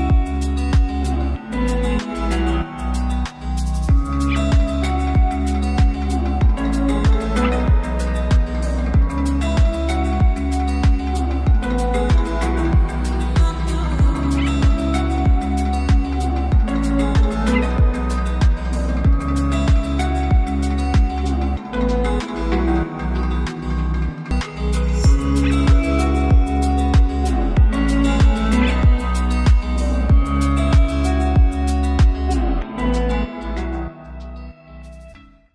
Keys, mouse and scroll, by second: 1.0 space, 2.4-4.4 drag, 5.1 right click, 6.3-14.8 drag, 15.9-17.2 shift+drag, 17.2 space, 23.9-25.8 shift+drag, 25.8 space, 30.0 space.